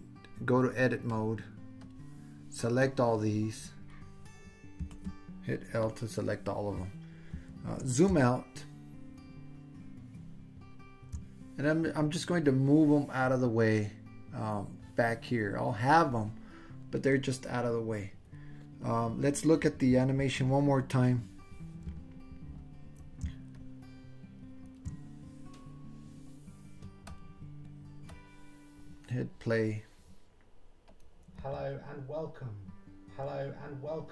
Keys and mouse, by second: 1.1-1.9 drag, 2.9-4.5 drag, 4.8 l, 9.2 ctrl+middle click, 9.4 ctrl+drag, 9.6 ctrl+middle click, 9.6 ctrl+drag, 9.8-11.0 ctrl+middle drag, 12.5-14.6 drag, 23.5-24.7 ctrl+middle drag, 27.2-28.2 drag, 31.0 click.